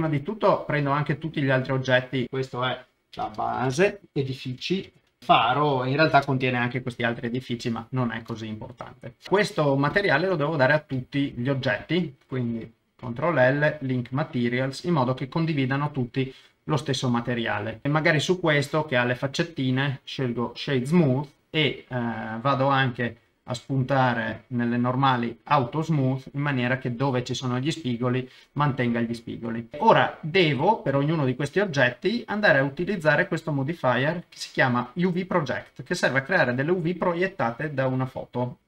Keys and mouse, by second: 2.2-6.7 drag, 11.3 shift+click, 11.8 shift+click, 12.8 ctrl+l, 17.7 click, 19.2-20.8 right drag, 24.7 middle click, 25.5 click, 32.5 click, 33.2-37.7 drag.